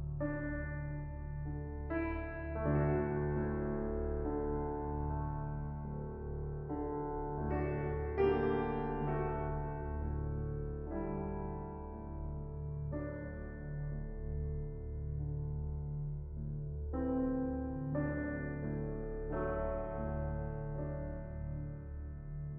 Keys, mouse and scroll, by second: 1.0-2.3 drag, 2.5-4.8 scroll up 10, 4.8 click, 5.9-6.3 middle drag, 6.3-6.6 scroll down 5, 6.6 click, 6.8 shift+middle drag, 7.1-8.2 scroll down 9, 7.3-7.8 middle drag, 8.2-10.1 middle drag, 12.3 click, 14.1 click, 15.0 ctrl+z, 15.9 click, 16.5 ctrl+z, 16.9 click, 19.2 click, 19.9 scroll up 1, 20.8 scroll up 3, 20.9-22.5 middle drag.